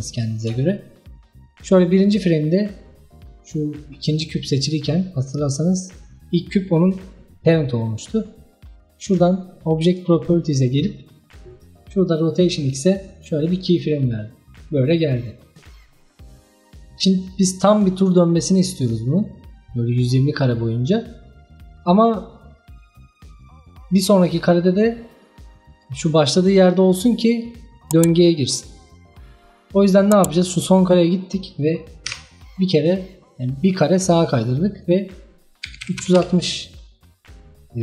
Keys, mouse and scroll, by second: 5.0-7.0 scroll up 4, 9.9 click, 13.5-16.5 drag, 19.5-23.9 drag, 25.8 click, 26.4-29.4 drag, 32.1 Right, 34.8-37.8 drag.